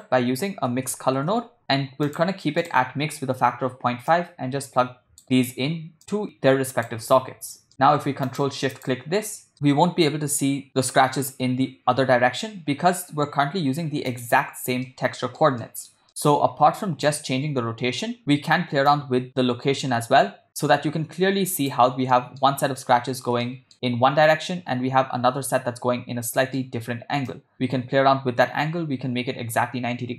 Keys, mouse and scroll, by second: 4.1-5.2 drag, 6.0 click, 7.8 middle click, 8.3 ctrl+click, 9.3 ctrl+shift+click, 9.7-10.4 ctrl+middle drag, 10.7 ctrl+middle click, 14.1 click, 14.9 ctrl+middle click, 15.6 middle click, 16.1 ctrl+middle drag, 17.1-18.2 drag, 18.9-21.8 drag, 22.2 ctrl+middle click, 23.4-23.7 shift+middle drag, 26.3 scroll up 1, 26.4 middle click, 27.3-30.1 drag.